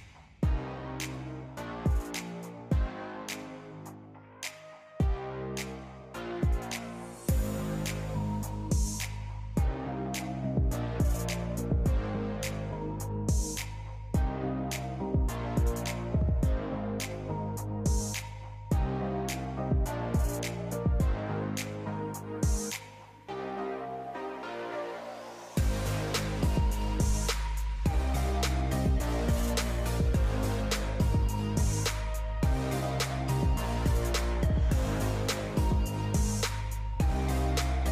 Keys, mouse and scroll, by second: 0.3 shift+a, 4.6 click, 6.9 scroll up 4, 8.7-10.4 scroll down 3, 10.4 click, 12.5-15.5 drag, 17.2-17.9 scroll down 4, 17.9 drag, 19.9 click, 21.0-22.0 drag, 32.7-33.4 scroll up 5, 33.5 scroll down 4, 34.2 click.